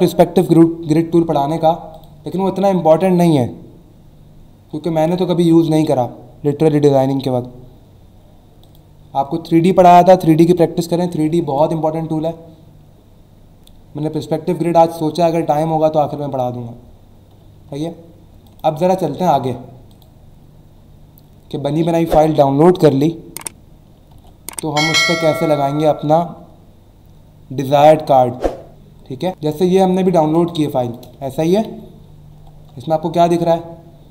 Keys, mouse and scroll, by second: 1.9 click, 5.3 ctrl+w, 8.6 click, 11.4 ctrl+w, 17.7 ctrl+w, 18.4 click, 19.9 click, 24.1 ctrl+w, 29.6 alt+scroll up 1, 30.2 alt+scroll up 1, 30.4-32.3 typing, 30.5 click, 32.8-34.0 alt+scroll down 3.